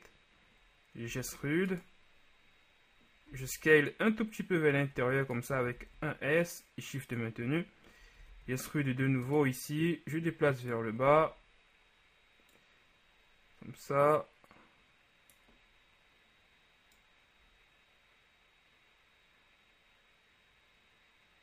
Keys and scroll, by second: 1.3 e, 3.6 shift+e, 5.8 s, 8.2 e, 8.4 z, 11.2 z.